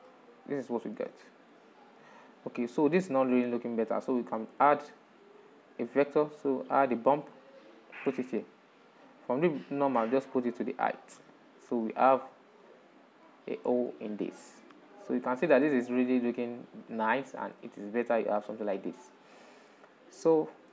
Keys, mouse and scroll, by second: 2.5 click, 3.0-4.6 shift+middle drag, 4.6 shift+a, 9.6-12.7 drag, 12.9-13.5 scroll up 2, 14.5-20.7 middle drag.